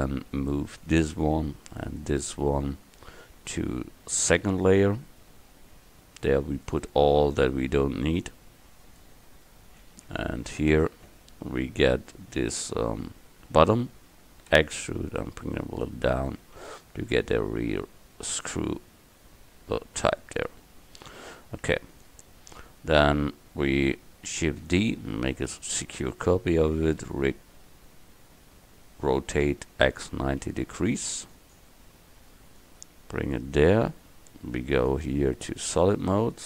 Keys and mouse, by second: 4.4 m, 10.8 Tab, 14.6 e, 15.6 click, 16.5 Tab, 16.9 click, 21.3 KP_1, 24.8 shift+d, 27.2 r, 32.6-34.2 drag.